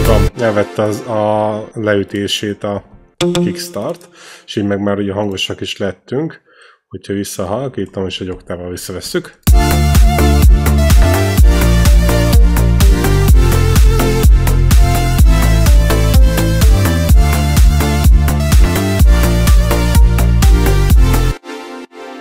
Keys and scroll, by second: 0.1 space, 3.0 r, 8.6 ctrl+Down, 9.3 space, 17.0 ctrl+Up, 21.1 space.